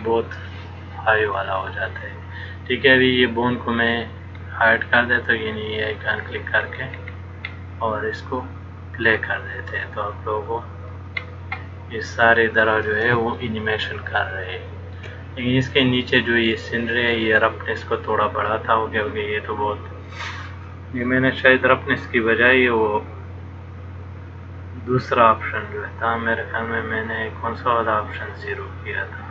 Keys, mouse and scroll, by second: 1.5 click, 5.9 click, 6.9-7.6 scroll down 4, 9.3 click, 11.4-13.4 scroll up 2, 13.6 shift+middle click, 25.7 click.